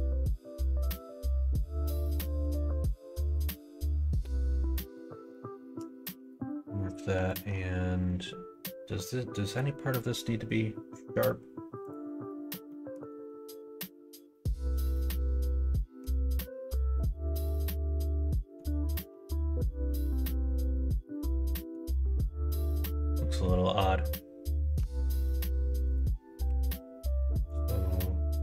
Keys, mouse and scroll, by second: 0.2-2.3 middle drag, 5.9 q, 7.2 click, 8.0 middle click, 15.1 middle click, 16.3 Tab, 17.1-18.5 middle drag, 18.7 middle click, 19.0 Tab, 19.6 middle click, 21.2 middle click, 22.3 middle click, 24.7 Tab, 25.0 middle click, 26.3 q.